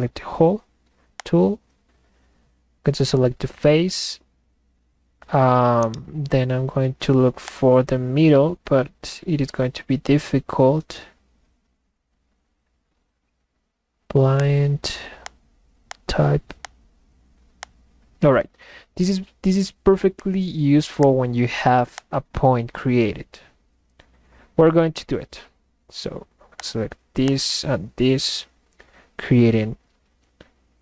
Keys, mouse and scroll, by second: 1.2 click, 5.8-6.6 middle drag, 5.9-6.7 right drag, 7.4-10.6 drag, 14.4 click, 15.2 click, 15.9 click, 16.6 click, 17.6 click, 21.0 click, 22.0 click, 26.6 click, 27.3 click.